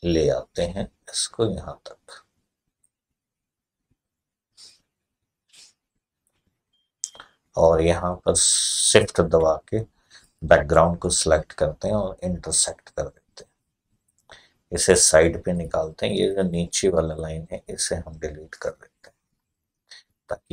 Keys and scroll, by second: 18.5 Delete.